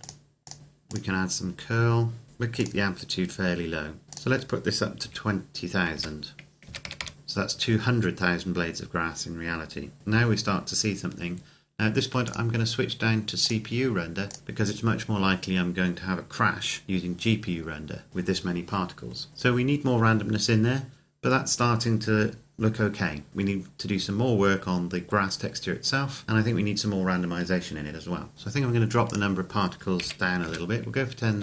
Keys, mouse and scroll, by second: 1.2 click, 2.8 click, 4.0 scroll up 1, 4.1 click, 5.1 KP_2, 6.0 KP_0, 7.1 KP_Enter, 12.6 click, 17.9 scroll up 1, 18.1 scroll down 1, 28.3 click, 29.8 KP_1, 30.2 KP_0.